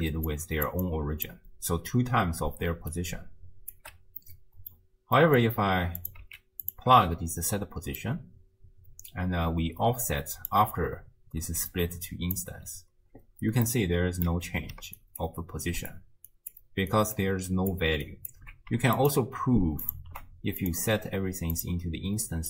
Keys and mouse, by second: 0.0-4.2 typing, 0.3-1.3 drag, 4.2 click, 5.2 click, 6.0 click, 6.2 x, 6.7 click, 6.9 m, 8.0 click, 9.3 click, 11.6 d, 11.7 click, 12.4 d, 12.5 d, 13.3 d, 13.7 middle click, 15.0 ctrl+alt+click, 15.7 ctrl+alt+click, 16.3 ctrl+alt+click, 17.0 ctrl+alt+click, 17.6 ctrl+alt+click, 18.2 ctrl+alt+click, 19.0 ctrl+shift+click, 19.9 ctrl+shift+click, 20.6-21.7 drag.